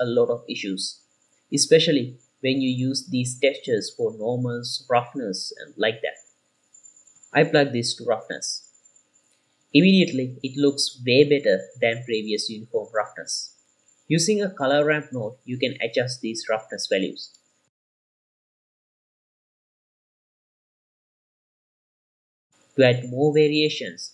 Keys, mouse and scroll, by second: 0.3-4.5 middle drag, 4.8-5.2 scroll down 2, 4.9 middle drag, 5.2 click, 5.6 click, 6.1-6.7 middle drag, 6.8-7.8 drag, 8.9-9.4 ctrl+shift+drag, 10.2-13.6 middle drag, 11.8-13.6 scroll up 1, 14.5-14.9 scroll up 2, 14.9 q, 16.1 click, 17.7-19.1 drag, 19.3-20.4 middle drag, 19.3-20.4 scroll down 3, 21.1 middle click, 22.0-22.4 middle drag, 22.4 click, 22.7 shift+a.